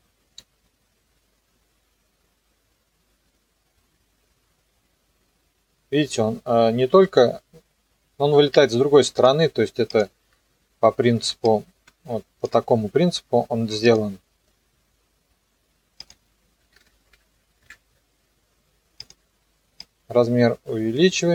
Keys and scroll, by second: 16.6 KP_1, 16.7 KP_0, 17.6 KP_Enter.